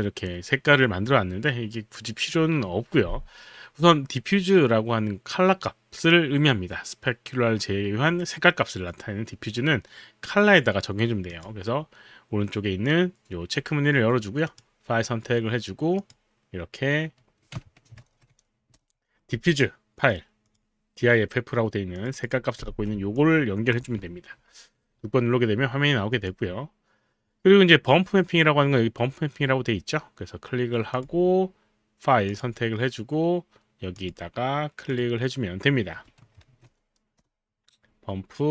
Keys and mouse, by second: 11.3 click, 14.5 click, 16.0 click, 18.0 ctrl+v, 18.8 Return, 20.4 click, 21.9 click, 22.1 click, 24.3 6, 26.1 click, 30.9 click, 32.3 click, 34.0 click, 36.5 ctrl+v, 37.2 Return.